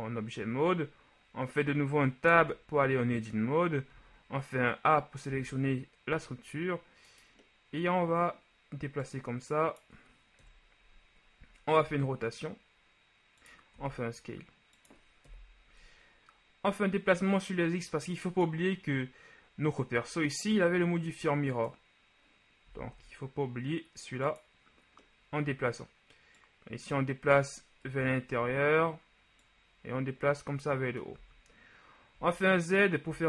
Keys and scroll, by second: 2.5 Tab, 4.0 a, 5.3 s, 10.5 KP_3, 11.9 r, 13.8 s, 15.3 KP_1, 22.9 s, 23.0 z, 28.0 KP_1, 31.3 z.